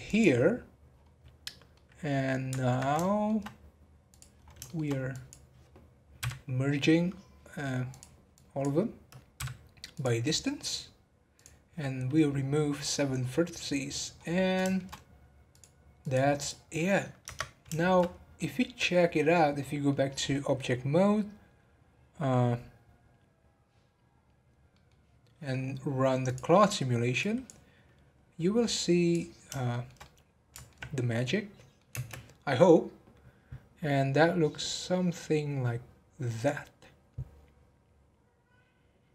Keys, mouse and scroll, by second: 0.5-1.7 scroll down 10, 1.7-4.0 middle drag, 4.0 click, 4.3 scroll up 5, 4.6-5.1 shift+middle drag, 5.1 click, 7.9 click, 9.3 m, 11.3-12.8 drag, 12.8-13.1 scroll down 10, 13.5 middle click, 14.3 scroll up 1, 14.6 shift+middle click, 15.5 click, 16.7 middle click, 17.2 Tab, 17.7-18.1 shift+middle drag, 18.1 scroll up 4, 18.3-21.5 middle drag, 24.1 scroll down 1, 24.7-26.5 middle drag, 26.5 click, 28.8-29.7 drag, 29.7-30.8 shift+middle drag, 30.8 scroll down 2, 31.0 middle click, 31.9 space.